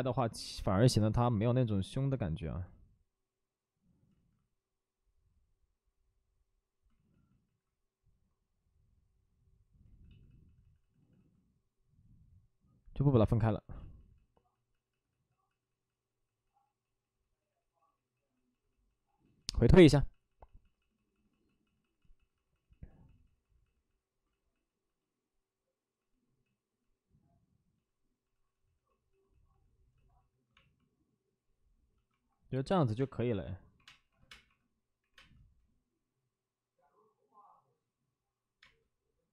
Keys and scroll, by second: 2.6 ctrl+z, 2.6 ctrl+z, 4.0 ctrl+z, 6.8 ctrl+z, 7.0 ctrl+z, 7.1 ctrl+z, 9.8 ctrl+z, 32.9-35.1 typing.